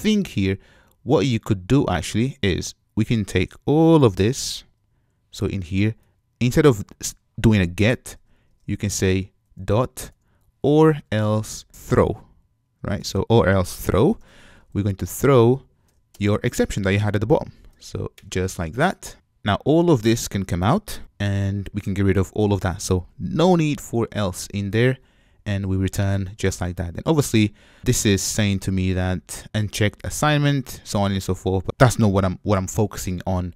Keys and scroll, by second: 5.2 super+x, 13.1 Return, 16.5 super+v, 18.2 shift+super+Return, 21.0 super+x, 24.7 super+v.